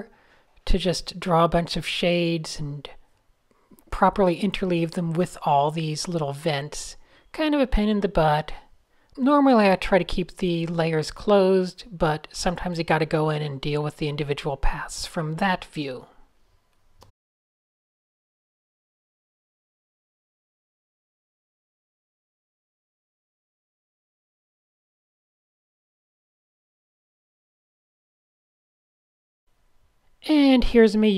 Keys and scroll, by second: 0.5 super+z, 3.9 super+z, 6.8 d, 9.6 Tab, 10.3 Tab, 11.2 f, 15.2 n, 15.9 super+z, 16.7 a, 17.7 n, 19.1-20.8 typing, 22.3 super+z, 24.3 super+z, 25.8 d, 26.0 super+space, 26.3 super+a, 27.0 shift+f, 27.5 a, 27.8 super+1, 27.9 a, 28.5 shift+super+Tab, 28.7 f, 29.1 super+0, 29.4 Tab, 30.8 alt+shift+super+r.